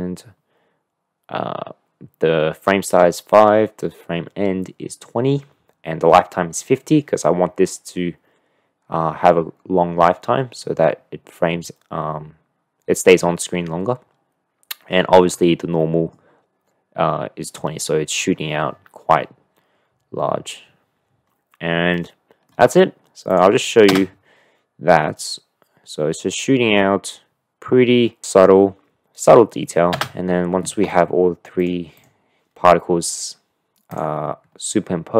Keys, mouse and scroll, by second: 15.8 click, 15.9 middle click, 22.0-22.5 middle drag, 23.3 drag, 23.9 space, 31.1 space, 31.6 click, 32.0-33.6 drag, 33.9 click.